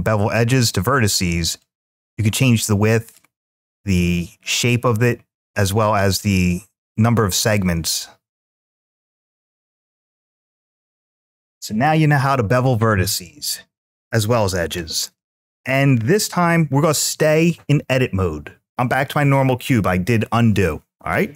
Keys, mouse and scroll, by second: 0.3 click, 1.4-3.0 drag, 3.8 click, 4.5 click, 6.2 click, 8.6-10.5 drag, 15.5 ctrl+z, 15.5 click.